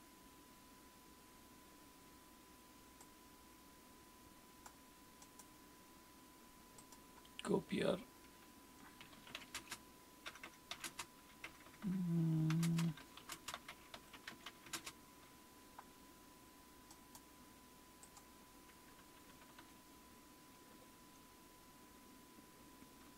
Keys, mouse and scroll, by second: 3.0-9.1 drag, 7.4-9.1 scroll down 1, 8.9-15.1 typing, 16.9-18.0 right drag, 18.0 middle click, 18.6 click, 19.0-19.6 typing, 20.6 typing.